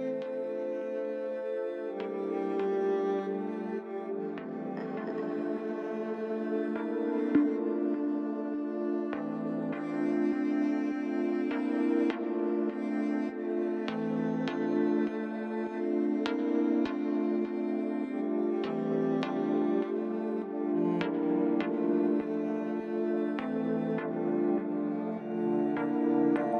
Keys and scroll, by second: 0.5 g, 6.6 j, 9.2 g, 23.1 Tab, 25.8 shift+z.